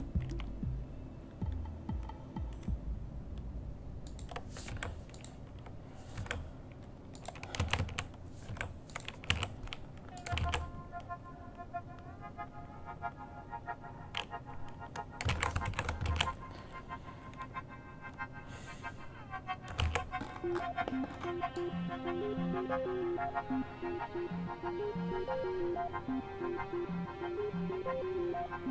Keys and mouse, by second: 5.4 i, 7.4 i, 7.7 a, 7.9 a, 9.2 i, 9.4 a, 10.5 alt+a, 13.4 alt+a, 15.5 alt+a, 15.9 shift+Left, 16.2 alt+a, 20.0 alt+a, 21.7-23.1 drag.